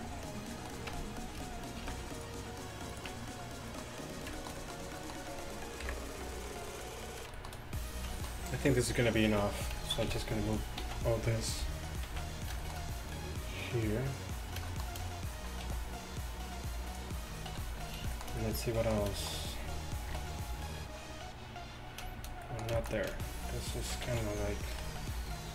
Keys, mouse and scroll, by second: 0.0 Tab, 0.9 Tab, 1.9 ctrl+r, 3.1 Tab, 5.9 KP_1, 6.8-7.4 drag, 7.7 click, 9.4-12.2 typing, 10.7-12.5 middle drag, 13.1-14.2 drag, 15.8 g, 17.6 a, 19.0 click, 20.2 KP_7, 23.2-24.8 ctrl+drag, 24.1 z, 24.8 KP_7.